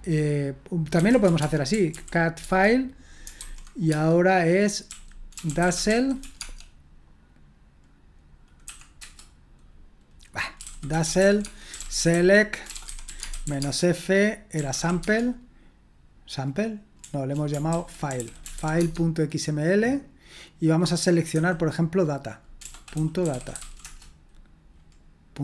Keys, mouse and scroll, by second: 0.7-6.7 typing, 8.9 Return, 8.9 typing, 10.3-15.2 typing, 17.0-19.1 typing, 17.7 ctrl+w, 22.6-24.1 typing.